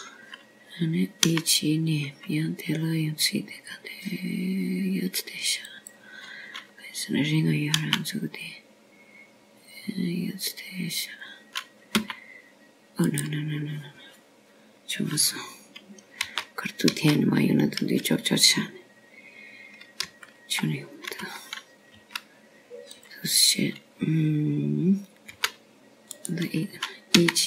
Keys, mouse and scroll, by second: 1.0 KP_7, 1.8-3.7 scroll down 2, 4.1 e, 10.6 e, 14.9 e, 19.1 ctrl+z, 19.8 ctrl+z, 22.9 ctrl+z, 24.9 r.